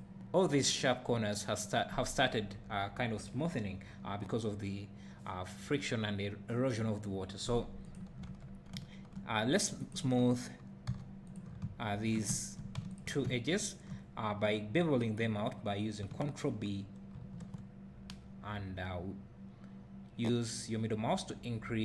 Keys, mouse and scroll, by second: 0.5 click, 7.8 click, 8.2 Tab, 8.7 `, 9.8 click, 10.9 2, 11.3 click, 12.3 `, 12.9 shift+click, 13.2 `, 17.1 ctrl+b.